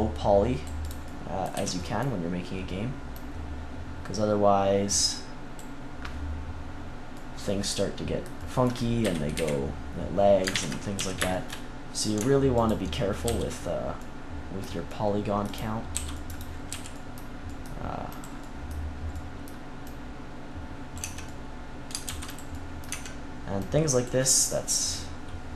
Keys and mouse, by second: 1.6 z, 7.1-8.6 middle drag, 9.0 KP_3, 9.3 KP_1, 10.5 ctrl+KP_3, 10.9 z, 13.2 c, 13.7 click, 15.5-16.5 drag, 15.9 c, 16.6 z, 20.9 Tab, 22.0 ctrl+s, 22.8 Tab, 23.5 click.